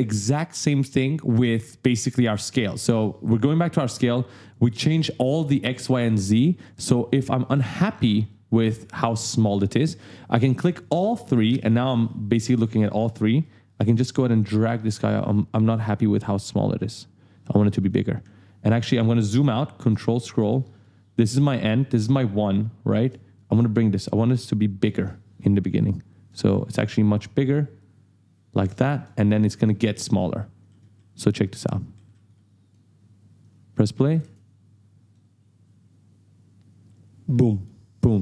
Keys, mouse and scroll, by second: 1.8 click, 2.3 click, 2.7 click, 3.2 click, 3.8 click, 4.4 click, 6.0 click, 6.6 shift+click, 8.3 right click, 9.1 right click, 9.2 w, 10.6 click, 11.1 shift+click, 11.5 shift+click, 12.6 right click, 13.4 click, 14.1 right click, 15.2 click, 18.3-19.0 ctrl+scroll down 2, 19.2 ctrl+scroll up 1, 19.7-20.1 ctrl+scroll down 2, 20.5 right click, 22.9 right click, 23.3 click, 24.6 click, 26.5 right click, 27.8 click, 29.3 right click, 31.6 right click, 32.0 a, 32.3 e, 33.4 click, 34.2 space, 35.1 right click.